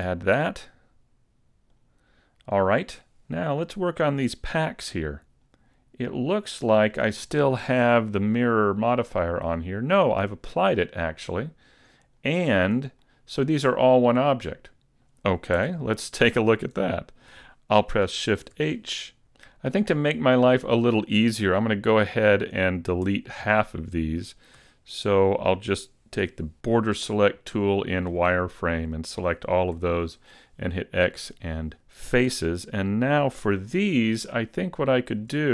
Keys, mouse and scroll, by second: 1.7 click, 3.7 right click, 6.6 click, 8.2 click, 12.2 click, 13.0 middle click, 15.6 Tab, 16.7 Tab, 18.5 shift+h, 19.3 a, 22.4 right click, 23.1 Tab, 23.7 middle click, 24.6 z, 24.9 middle click, 26.2 b, 29.7 x, 32.3 z, 32.9 middle click, 33.9 shift+middle click, 34.3-34.9 scroll up 3, 34.9 shift+middle click.